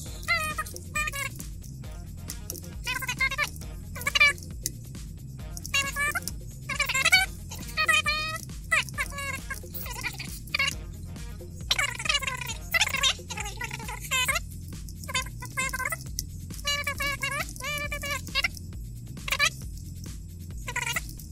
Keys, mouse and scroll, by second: 0.1-4.0 typing, 1.5 Left, 1.8 Right, 5.4-8.2 typing, 9.4-10.9 typing, 11.6-12.1 scroll down 2, 14.5-18.2 typing, 14.8 Return, 18.4 Return, 19.4-21.3 typing.